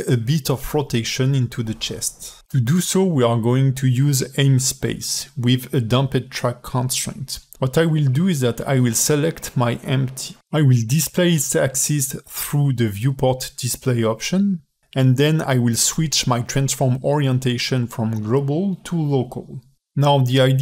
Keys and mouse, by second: 1.9 ", 2.4 ", 4.0 alt+middle click, 4.7 ctrl+Tab, 8.8 click, 15.1-17.7 alt+middle drag, 18.2 middle drag, 19.3-20.6 drag.